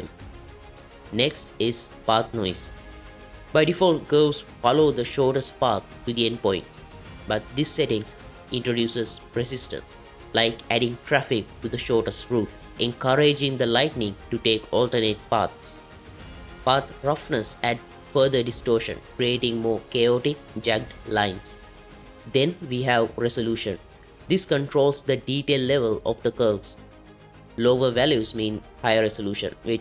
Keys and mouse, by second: 4.6-5.8 drag, 8.1-11.3 drag, 12.1-13.1 drag, 13.3 click, 13.8 KP_0, 16.4-22.5 drag, 25.5-28.0 drag.